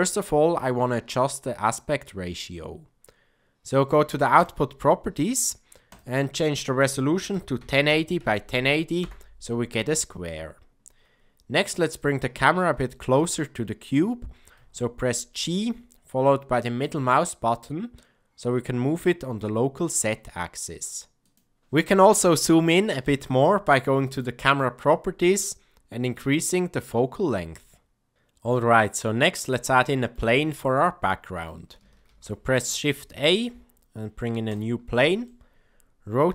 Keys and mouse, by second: 5.9-9.6 drag, 14.5 g, 26.1-28.1 drag, 28.7-29.2 middle drag, 29.7-30.1 shift+middle drag, 30.7-31.4 middle drag, 32.0 shift+a, 35.2-36.3 middle drag.